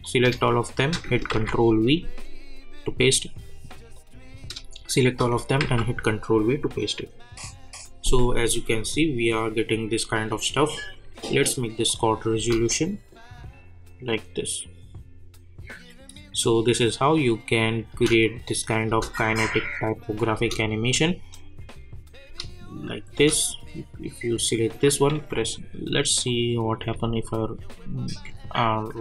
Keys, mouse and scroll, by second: 0.8 shift+click, 1.3 ctrl+v, 3.9 click, 5.0 shift+click, 5.6 ctrl+v, 9.5 click, 12.4 space, 17.9 space, 18.4 click, 18.9 space, 20.9 click, 22.2 space, 24.8 click, 26.9 r, 27.6-29.0 drag.